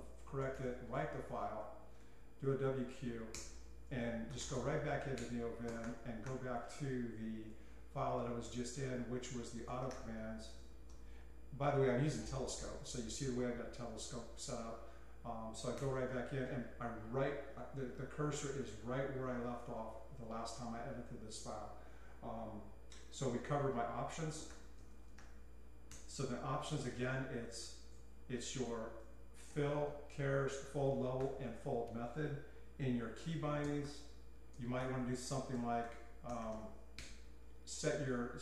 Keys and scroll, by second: 0.0-6.8 typing, 9.5-10.9 typing, 15.9 Return, 24.4-31.1 typing, 25.9 Return, 33.0-37.0 typing.